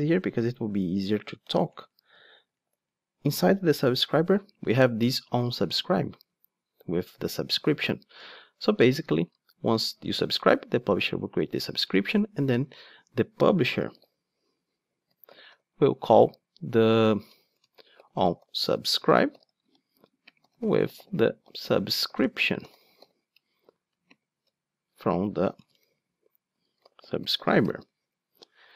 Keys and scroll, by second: 1.0 Down, 1.4 Right, 1.6 Down, 2.2 Right, 2.3 Down, 8.2 ctrl+Tab.